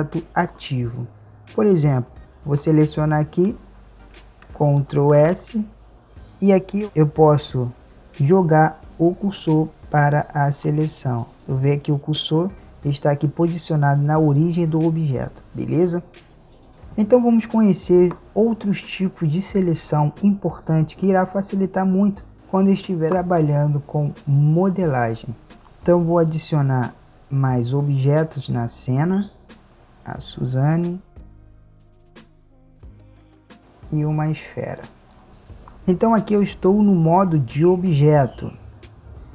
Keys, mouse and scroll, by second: 2.9-4.6 right drag, 5.2 shift+s, 8.8 shift+s, 25.5 z, 25.8-27.7 drag, 27.6 z, 29.7-31.1 drag, 31.1 middle click, 31.4 click, 33.4 s, 33.6-35.3 drag, 35.3 z.